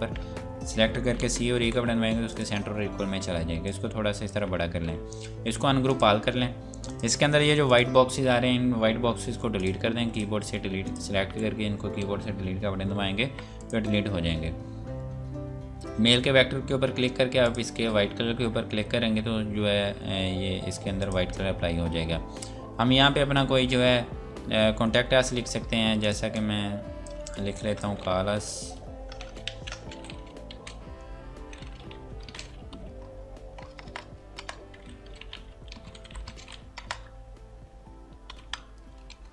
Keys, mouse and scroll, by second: 1.2-1.6 typing, 2.3 click, 2.8 scroll up 1, 3.7 click, 5.7 click, 9.2 Delete, 9.6 click, 9.8 Delete, 10.2 click, 10.4 Delete, 10.8 click, 11.3 Delete, 13.6 click, 17.4 click, 18.1 scroll down 1, 21.0 click, 21.4 scroll down 1, 22.2-24.4 scroll up 1, 25.3 scroll down 1, 26.0 click, 27.4 F2, 27.5 click, 28.6 F8, 29.4 ctrl+a, 30.4-32.6 typing, 33.6 BackSpace, 34.7-36.7 typing, 38.3 shift+;, 38.9 Return.